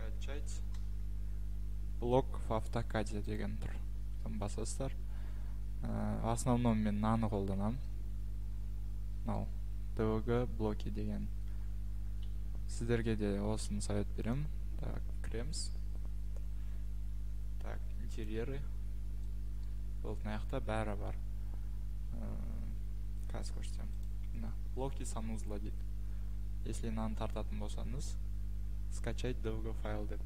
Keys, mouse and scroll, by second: 0.0-1.4 typing, 6.8-7.5 typing, 7.6 click, 7.6-8.0 scroll, 11.8-12.3 ctrl+scroll, 13.0-13.7 ctrl+scroll, 14.3 click, 18.2 click, 19.1-19.6 scroll, 19.6-20.4 scroll, 22.4-24.0 scroll, 24.0 click, 25.7-27.0 scroll.